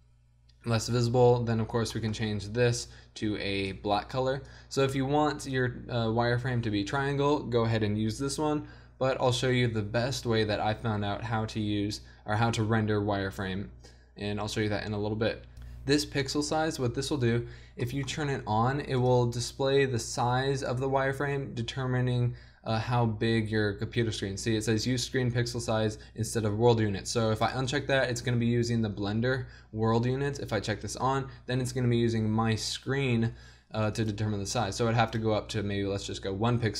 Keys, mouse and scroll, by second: 2.4-4.6 drag, 19.5-21.3 drag, 28.4-29.7 drag, 31.2-32.9 drag, 34.0-35.9 drag.